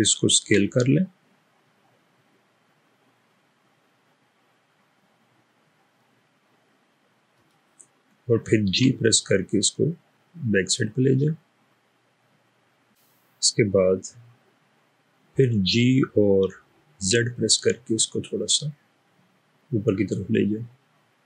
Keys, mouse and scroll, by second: 0.6 s, 8.8 g, 15.8 typing, 17.0 typing.